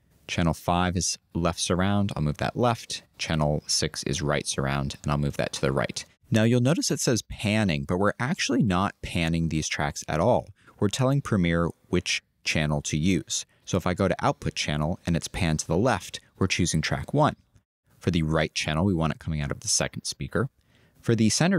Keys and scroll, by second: 2.3 super+a.